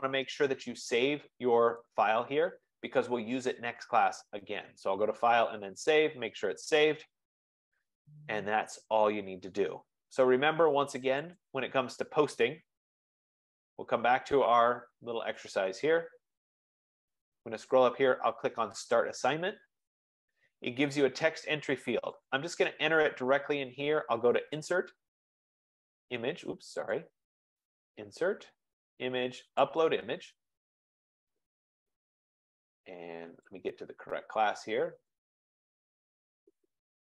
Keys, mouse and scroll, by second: 0.4 click, 2.1 click, 4.2 click, 6.1 click, 12.1 click, 13.7-15.7 scroll down 11, 16.4-17.7 scroll up 21, 19.2 click, 21.7-22.3 scroll, 22.4 click, 24.8 click, 27.0 click, 27.9 click, 28.7 F15, 30.0 click, 31.3 click, 33.7 click, 35.3 click, 35.6 click.